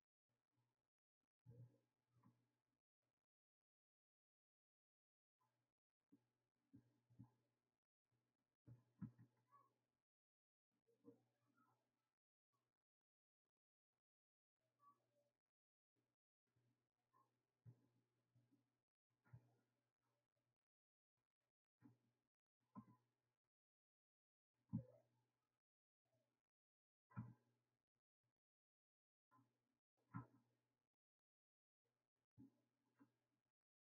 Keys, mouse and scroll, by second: 0.7-2.2 scroll down 2, 2.2 s, 4.6 click, 9.0 ctrl+r, 13.3-15.2 drag, 19.7-21.2 drag, 22.8 g, 24.7 ctrl+z, 25.9 click, 27.2 g, 29.3 click, 30.6 click, 31.3 click.